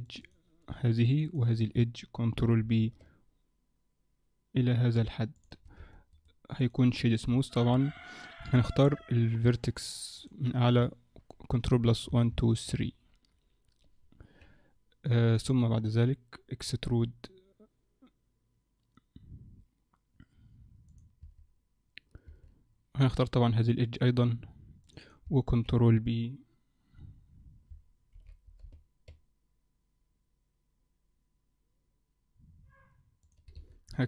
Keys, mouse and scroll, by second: 0.1 click, 0.2 click, 1.1 shift+click, 1.3 shift+click, 2.4 ctrl+b, 5.8 Tab, 6.2 right click, 7.0-7.4 scroll down 4, 7.4 shift+middle click, 7.8 Tab, 7.9-8.5 scroll up 2, 8.5 scroll up 1, 8.7 middle click, 9.5 click, 10.2 click, 12.1 ctrl+KP_Add, 12.3 ctrl+KP_Add, 15.8-17.0 scroll down 1, 17.0 e, 21.3 Tab, 22.3 Tab, 23.6 click, 24.0 click, 25.3 click, 28.2 ctrl+b, 33.6 Tab, 33.9-34.0 scroll down 3.